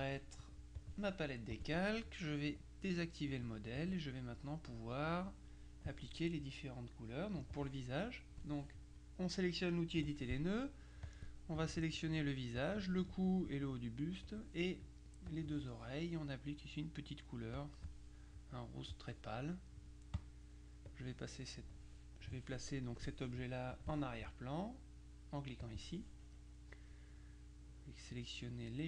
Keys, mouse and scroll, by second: 0.9 click, 1.6 click, 3.4-4.4 drag, 5.1 click, 7.5 click, 11.1 click, 12.7 shift+click, 14.3 click, 15.4 click, 17.6 click, 20.2 click, 20.9 click, 23.8 click, 25.7 click, 28.6 click.